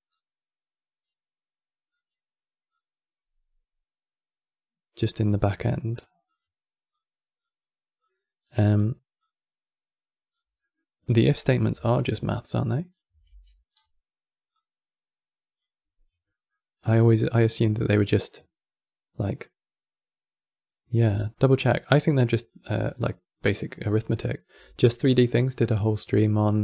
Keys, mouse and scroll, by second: 1.6 click, 2.4-5.4 drag, 5.6 click, 6.0 click, 6.6 click, 7.7 click, 8.9 click, 10.3-11.0 middle drag, 11.0 click, 11.6-12.9 alt+drag, 12.9 x, 13.6-14.2 scroll down 4, 14.2 click, 16.0-20.4 middle drag, 20.7 middle click, 21.2-21.5 scroll up 5, 21.5 middle click, 22.2 click, 23.1-26.2 drag.